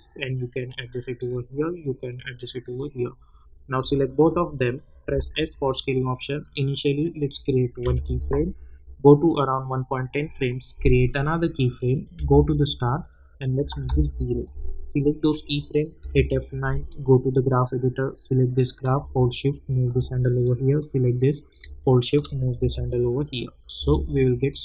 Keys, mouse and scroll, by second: 4.0 shift+click, 5.0 s, 6.8 click, 7.8 =, 8.0 =, 9.8 click, 12.1 j, 13.4 click, 13.8 Return, 14.4-16.0 drag, 16.0 F9, 16.9-20.4 drag, 20.4-22.5 drag, 22.5 space, 24.5 click.